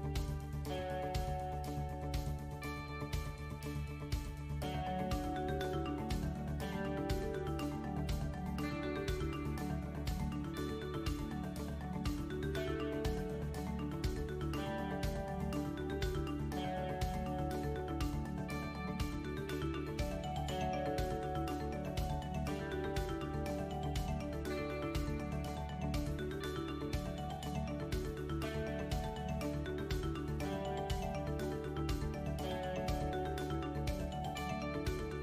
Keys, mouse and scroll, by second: 0.9 3, 1.2-2.8 scroll up 6, 1.5 shift+middle click, 2.5 middle click, 3.2 click, 5.2 middle click, 5.8-6.8 scroll down 4, 7.2 ctrl+r, 10.1-10.8 scroll down 4, 11.4-12.1 scroll down 1, 11.4 KP_1, 12.7-13.5 scroll up 7, 13.8-14.2 scroll up 4, 14.2 middle click, 14.9 click, 15.6 3, 15.8 click, 16.9-17.8 scroll down 13, 16.9 KP_1, 18.2 s, 20.7 shift+d, 22.1 click, 23.9 click, 24.9-25.4 scroll up 5, 25.4 shift+middle click, 25.9-26.4 scroll up 3, 26.4 middle click, 26.9-27.2 scroll up 1, 27.6 right click, 29.7 n, 30.7 click, 32.1 s, 33.9 n.